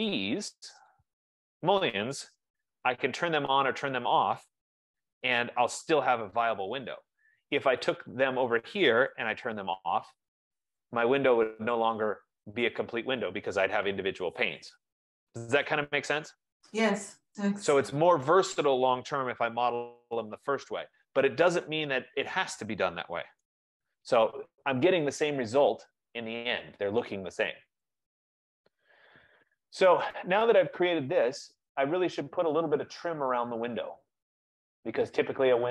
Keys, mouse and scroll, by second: 1.1 click, 2.3-3.5 typing, 8.2 click, 9.1-10.1 typing, 11.9 typing, 12.0 right click, 12.1-13.1 scroll, 13.3 Return, 13.3 scroll, 23.3-24.1 typing, 25.3-25.7 scroll, 27.9 right click, 28.4 Return, 29.2-30.4 scroll.